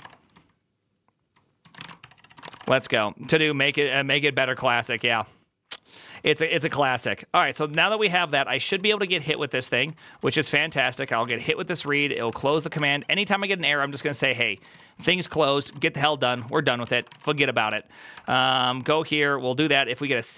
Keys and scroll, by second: 0.0-6.8 typing, 3.4 Return, 3.4 ctrl+c, 3.8 Return, 4.4 ctrl+c, 7.5 ctrl+t, 8.1-17.1 typing, 9.5 ctrl+u, 16.1 Return, 16.2 Return, 16.3 ctrl+t, 16.7 ctrl+c, 17.2 ctrl+d, 17.5 ctrl+d, 19.5-20.3 typing.